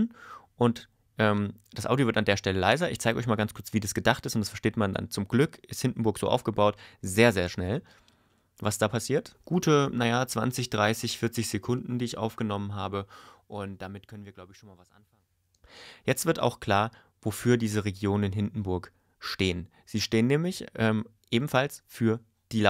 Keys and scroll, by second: 9.3 space, 15.5 space.